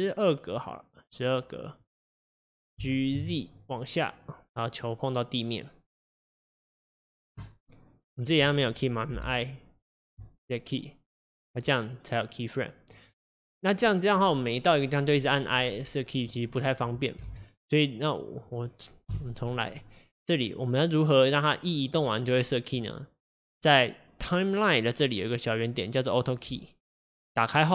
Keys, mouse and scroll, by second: 11.3-17.3 drag, 17.3 ctrl+z, 18.3-19.7 drag, 19.7 x.